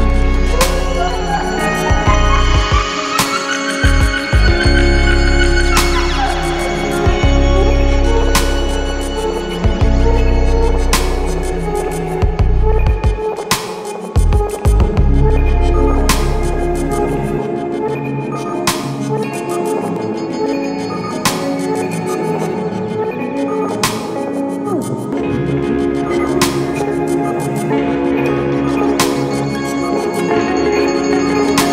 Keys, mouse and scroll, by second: 1.9 click, 15.8 click, 21.5 click.